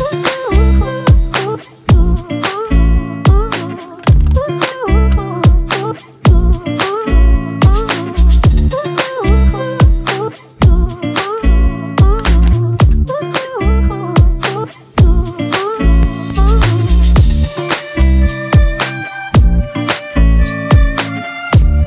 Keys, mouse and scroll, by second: 4.7 typing, 7.2-8.0 typing, 8.7 double click, 10.9-13.1 drag, 13.1 typing, 13.3 click, 14.3 double click.